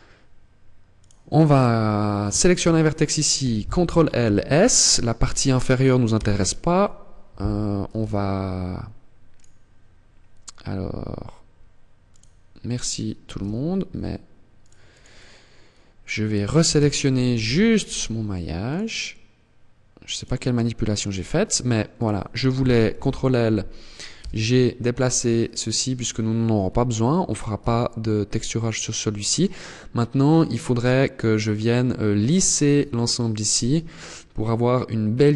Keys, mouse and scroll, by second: 14.4 click, 15.7 right click, 16.6 ctrl+l, 19.5 click.